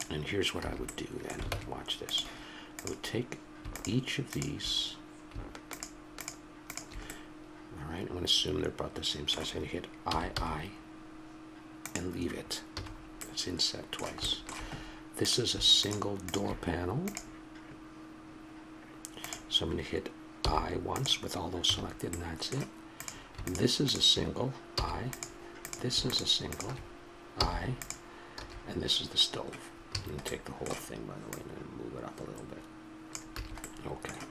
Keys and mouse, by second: 0.0 middle click, 0.6 a, 1.0 click, 1.5 ctrl+Tab, 2.8-4.9 right drag, 7.1-9.1 middle drag, 11.8 i, 12.7 a, 12.9-15.2 middle drag, 15.2-17.1 drag, 20.3 i, 21.6 a, 22.2 middle click, 22.9-23.9 drag, 24.7 i, 27.3 i, 28.4 a, 29.9 a, 31.2-33.1 middle drag, 33.4 a.